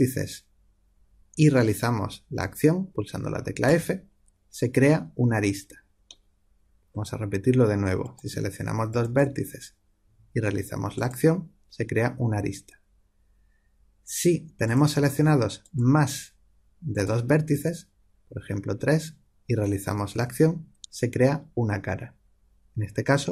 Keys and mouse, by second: 3.6 f, 6.0-7.9 middle drag, 7.9-10.6 drag, 10.8 click, 14.6-18.6 drag, 20.0 f.